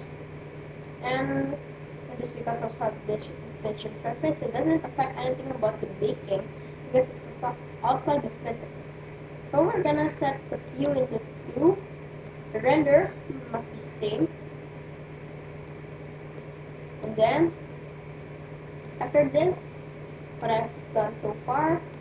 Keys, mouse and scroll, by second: 0.8-2.5 middle drag, 5.7-8.2 scroll down 1, 8.2-10.6 scroll up 1, 10.6-12.5 drag, 11.7-13.4 middle drag, 15.7-18.7 middle drag, 20.3-22.0 drag.